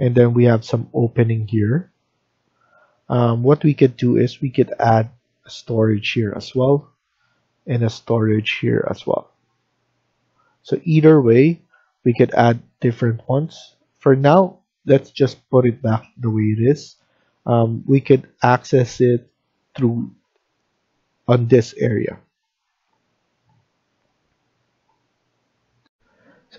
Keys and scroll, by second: 24.2 Escape, 24.4 Escape, 25.7 F1.